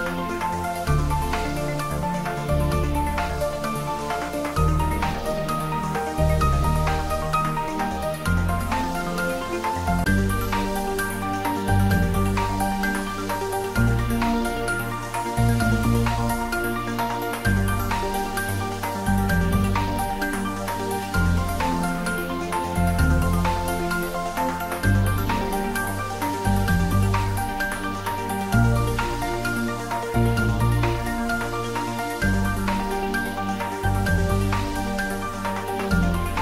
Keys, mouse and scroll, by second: 0.4-1.1 middle drag, 1.8 g, 2.2 z, 3.0 click, 3.4-4.7 scroll up 1, 4.7 click, 5.2-5.7 scroll up 1, 5.7-6.8 middle drag, 6.9-8.8 scroll down 1, 9.3 click, 10.0 shift+z, 11.4-12.3 typing, 12.9 click, 13.3-14.3 middle click, 14.5 click, 17.1 Tab, 17.5 click, 18.6 3, 19.1 click, 20.4 3, 20.8 click, 22.0 shift+z, 22.4 click, 25.4 click, 26.9 i, 29.5 i, 29.8-30.3 scroll down 1, 30.4-31.7 middle drag, 31.7-32.9 middle drag, 34.2 click, 35.9 e.